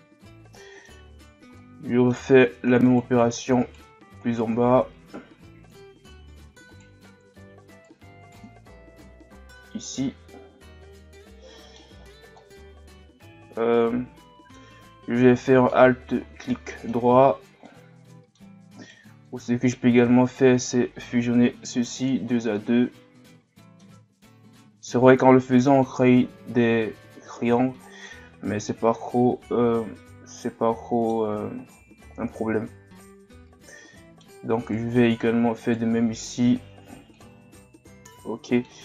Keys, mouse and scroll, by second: 2.9 right click, 3.6 shift+right click, 4.2 shift+right click, 5.1 m, 6.7 right click, 7.7 shift+right click, 8.2 shift+right click, 9.1 m, 10.5-10.8 scroll down 2, 10.8-12.0 middle drag, 12.0-12.4 scroll up 2, 12.4-15.2 middle drag, 15.2 scroll down 1, 15.5-18.8 middle drag, 18.8 right click, 19.3-20.3 middle drag, 20.3 shift+right click, 22.5-28.9 middle drag, 31.7-34.6 middle drag, 34.6 right click, 35.0 middle click, 35.6 shift+right click, 36.6 m, 37.9-38.8 middle drag.